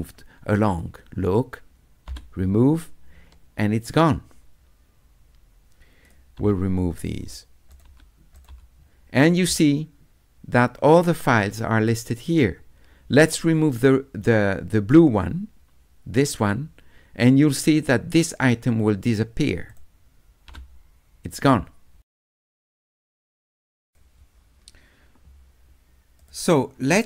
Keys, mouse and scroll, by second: 0.7 click, 6.1 click, 7.0 click, 7.7 click, 8.4 click, 16.3 click, 19.7 click, 23.9 click, 26.2 click.